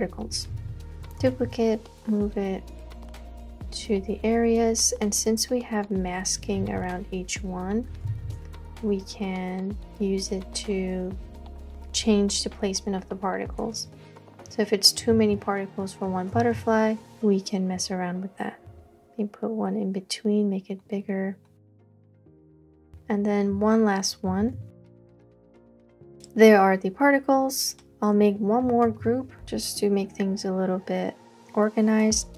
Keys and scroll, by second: 0.5 super+j, 1.3 super+t, 4.3 Return, 6.6 super+j, 8.1 super+t, 13.6 Return, 15.2 super+j, 16.4 super+t, 22.7 Return, 24.6 super+j, 25.1 super+t, 26.2 Return, 28.9 super+g.